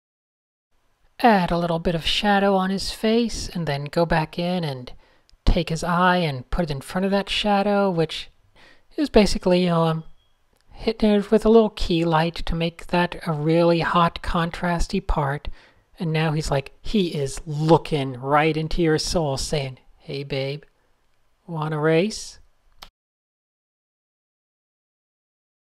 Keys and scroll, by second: 0.6 Tab, 0.7 n, 3.2 super+0, 4.2 super+space, 4.3 super+space, 4.4 super+space, 5.7 super+0, 6.3-6.6 super+space, 7.3 super+space, 7.4 super+space, 7.7 a, 8.4 super+h, 9.6 shift+super+}, 10.2 shift+super+a, 10.7 super+z, 11.1 super+h, 12.0 super+h, 13.8 v, 14.3 shift+super+}, 14.6 super+0, 14.7 shift+super+a, 15.3 super+z, 16.4 super+space, 16.9 super+space, 16.9 Tab, 17.3 Tab, 17.4 n, 20.5 super+-, 20.5 super+0, 23.3 Tab.